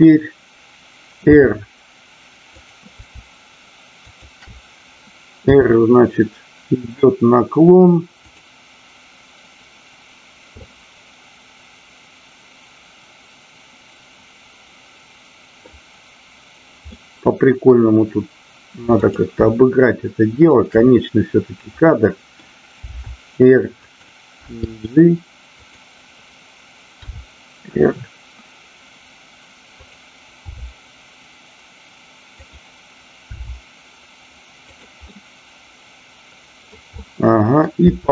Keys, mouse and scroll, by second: 1.2 r, 4.0 shift+click, 5.4 r, 8.2 click, 10.7-15.7 middle drag, 16.9-17.8 middle drag, 19.1 click, 20.4 shift+click, 21.8-22.4 middle drag, 22.8 r, 23.8 click, 24.4 g, 25.7 click, 29.7 click, 32.4 click, 34.7 click, 35.0-36.8 middle drag, 36.9 middle click, 37.8 r.